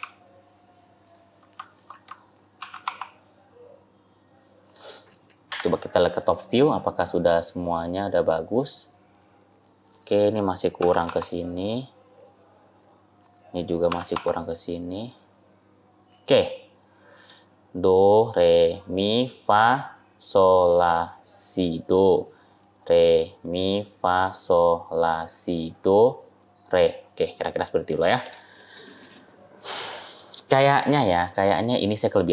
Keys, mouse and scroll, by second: 1.6 ctrl+z, 2.4 g, 5.4 KP_7, 6.2 click, 9.8 click, 10.7 g, 13.1 click, 13.7 g, 16.4 click, 16.4 middle click, 26.8 middle click, 27.4-28.5 scroll down 1, 29.9-31.4 scroll down 2, 31.4 click.